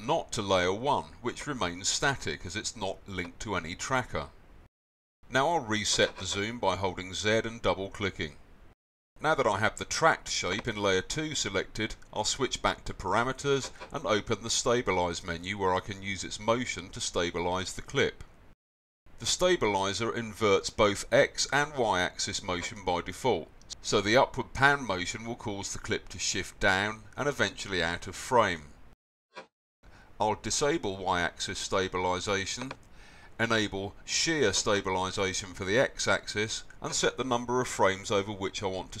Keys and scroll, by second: 4.9 z, 38.1 BackSpace, 38.7 2.